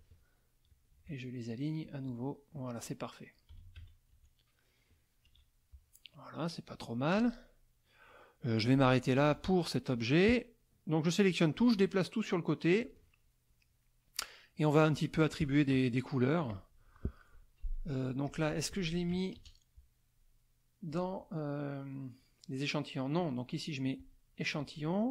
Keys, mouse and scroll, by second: 0.7 shift+click, 1.8 click, 3.5 KP_5, 3.8 KP_3, 4.1 KP_Subtract, 5.2 KP_Subtract, 5.9 middle click, 6.4 middle click, 7.1 click, 9.1 click, 11.3-13.0 drag, 13.1 ctrl+middle click, 13.8 ctrl+middle click, 15.8 middle click, 16.5 click, 17.7 F2, 18.3 click, 20.9 click, 23.1 click.